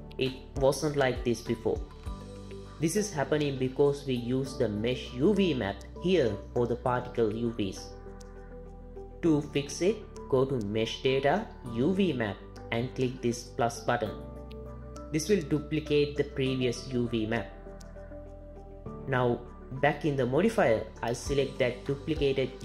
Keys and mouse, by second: 9.7 click, 11.6 click, 15.3 click, 19.5 click, 21.2-22.6 drag.